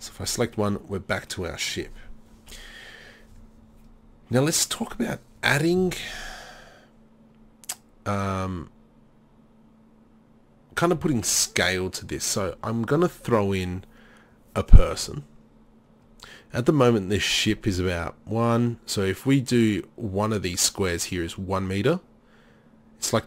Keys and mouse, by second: 2.6 KP_3.